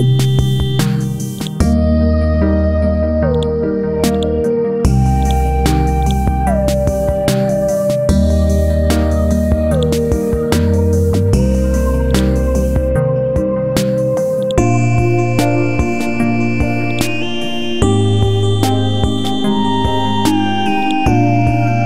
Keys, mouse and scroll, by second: 11.5 ctrl+z, 12.1 click, 13.0 KP_7, 14.4-17.9 drag.